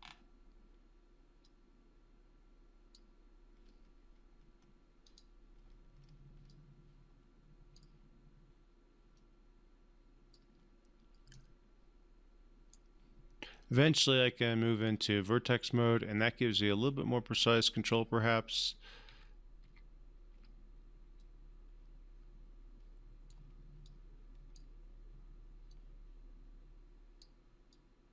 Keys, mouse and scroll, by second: 0.0 scroll up 1, 1.4-3.0 drag, 11.3-12.9 right drag, 14.0-14.9 drag, 19.1 e, 19.6 r, 20.3 w, 21.1-23.3 drag.